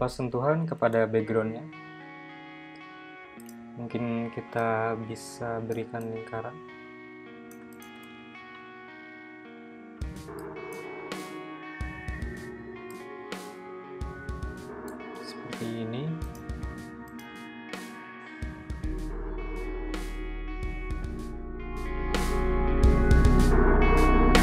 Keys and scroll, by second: 7.7 m, 11.2 m, 19.9 i, 21.6 v, 22.5 shift+super+[, 23.0 BackSpace.